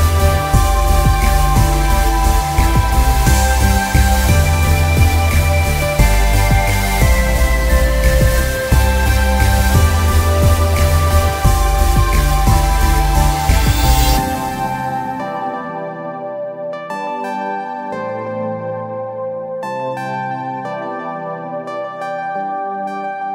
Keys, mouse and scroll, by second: 2.4 alt+scroll up 1, 4.5 click, 22.9 alt+scroll down 1.